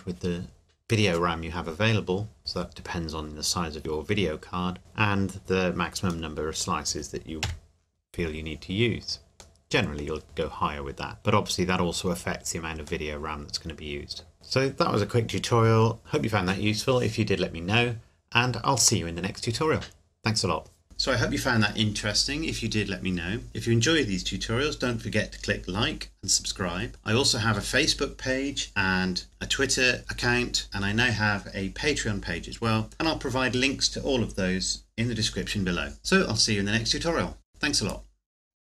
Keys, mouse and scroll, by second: 6.3 middle click, 6.5 middle click, 7.5 KP_7, 8.3 scroll down 1, 9.6 middle click, 11.1 scroll up 1, 13.1 middle click.